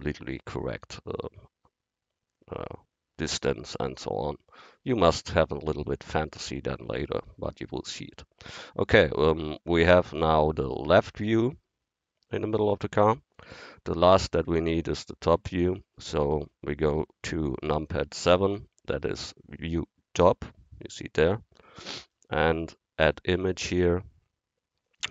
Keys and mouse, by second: 9.7-11.8 drag, 18.4 KP_7, 23.0-25.1 drag.